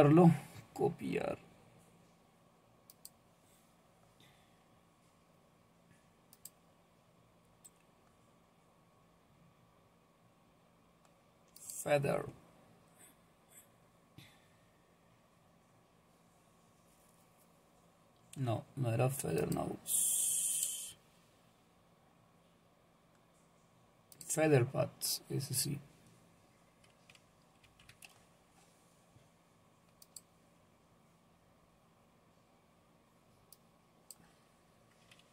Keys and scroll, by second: 27.6 ctrl+v.